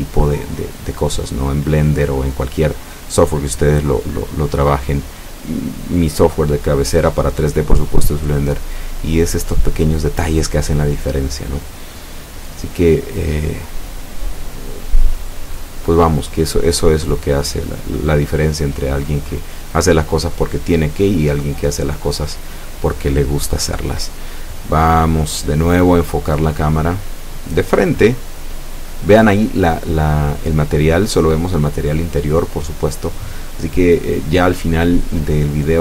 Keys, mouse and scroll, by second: 1.9 F12, 21.2 Escape, 23.0 scroll up 2, 25.6 ctrl+KP_1, 26.5 ctrl+alt+KP_0, 28.4 right click, 29.6 g, 30.7 click, 31.0-31.5 scroll up 1, 32.1 F12.